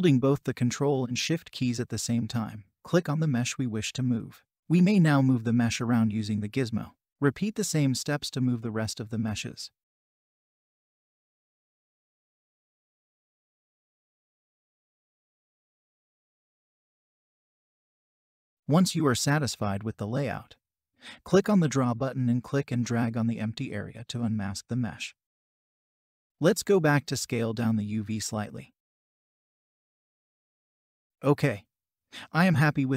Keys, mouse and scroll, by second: 0.3 ctrl+shift+click, 6.1 ctrl+shift+click, 9.6 ctrl+s, 9.9 ctrl+shift+click, 12.7 ctrl+shift+click, 16.2 ctrl+shift+click, 17.6 ctrl+shift+click, 18.9 ctrl+shift+click, 19.5 ctrl+shift+click, 21.5 ctrl+shift+click, 22.7 ctrl+click.